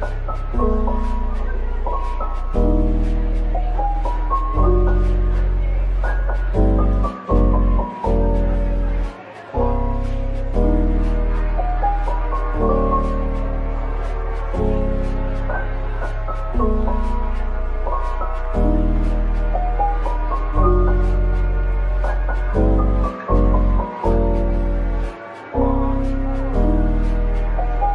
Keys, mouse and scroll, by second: 0.1 middle click, 8.0-8.3 typing, 10.2 middle click, 11.4 typing, 11.8 middle click, 13.0 Tab, 14.1 typing, 15.2 middle click, 16.2-17.5 scroll down 1, 17.5 typing, 18.9 typing, 23.2 middle click, 24.7 typing, 25.6 middle click, 26.3-27.9 typing, 26.9 middle click.